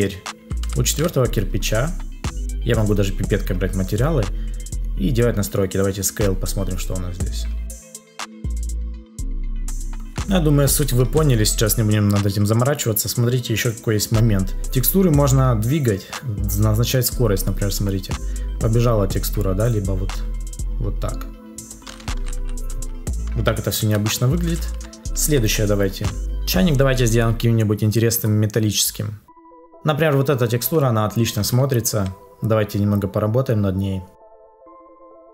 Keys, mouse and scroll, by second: 8.0 Return, 8.1 Return, 8.6 Return, 8.6 BackSpace, 8.7 Return, 9.0 ctrl+z, 14.6 ctrl+z, 26.2 ctrl+s.